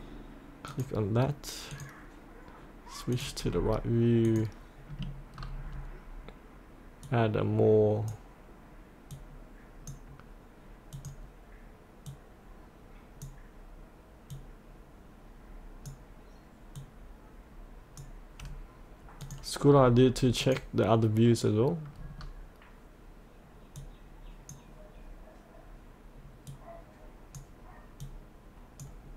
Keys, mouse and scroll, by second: 0.8 click, 3.5-4.3 scroll down 1, 4.3 click, 5.3 scroll down 1, 7.1-18.2 drag, 19.7-20.4 scroll down 1, 20.4 click, 22.0-23.8 scroll down 1, 23.8-29.1 drag.